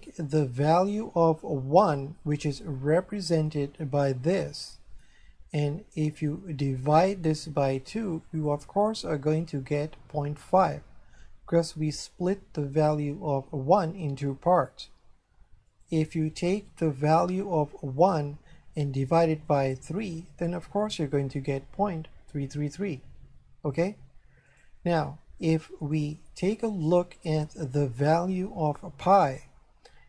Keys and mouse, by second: 1.8 right click, 4.6 click, 6.2 click, 15.7 click, 17.1 click, 19.5 click, 24.5 click, 25.9 click, 28.0 right click.